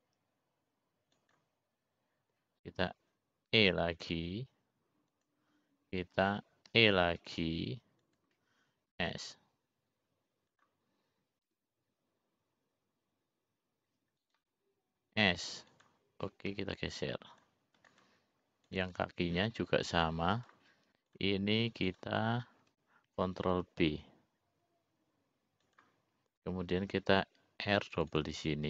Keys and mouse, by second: 5.7 e, 8.8 e, 10.9 s, 13.5 g, 17.2 s, 18.5 g, 20.0 click, 20.9 click, 22.4 click, 23.2 click, 24.1 click, 25.5 ctrl+b.